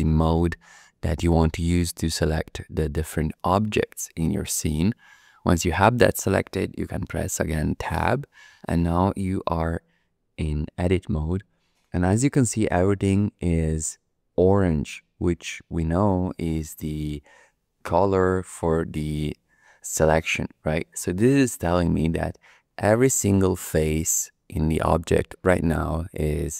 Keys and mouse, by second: 8.0 Tab, 25.3-26.5 middle drag.